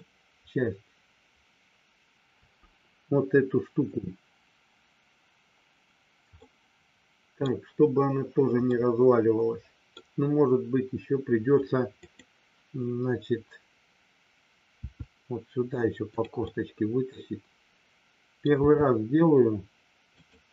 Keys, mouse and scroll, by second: 0.0-2.1 middle drag, 6.4 scroll up 2, 6.5 middle click, 8.6 scroll up 2, 8.9-9.9 middle drag, 11.9 click, 16.5-18.4 middle drag, 20.0 click.